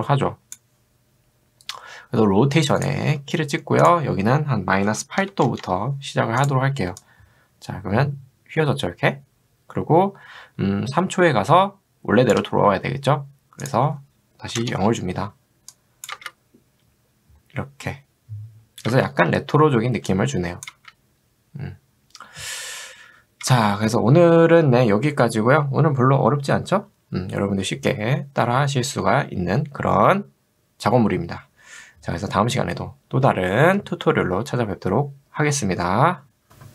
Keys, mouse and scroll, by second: 2.8 click, 4.9 0, 5.2 7, 5.5 Return, 7.5-12.4 drag, 14.6 0, 15.8 click, 18.9 space, 20.1 click, 20.8 space, 23.5 space.